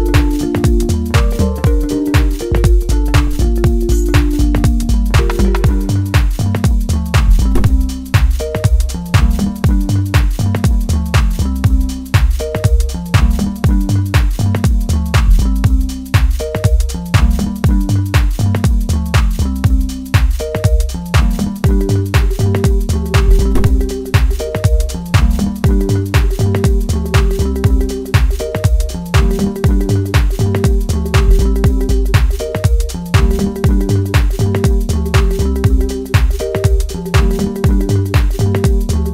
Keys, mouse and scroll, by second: 5.1-8.3 drag, 8.3 ctrl+z, 9.5-13.0 drag, 13.0-15.9 middle drag, 15.9-19.2 drag, 19.2-26.9 middle drag, 26.9 click, 28.9-30.8 middle drag, 30.8-36.9 drag, 36.9-39.1 middle drag.